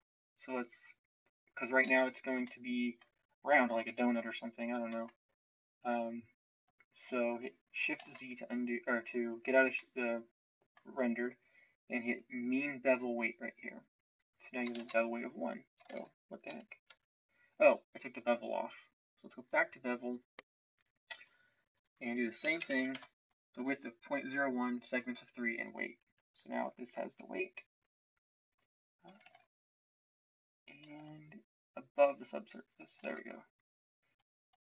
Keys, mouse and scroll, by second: 1.9 shift+z, 8.0 shift+z, 14.8 shift+z, 15.8 shift+z, 16.4 Tab, 16.8 Tab, 29.2 shift+z, 30.8 shift+z, 33.0 shift+z.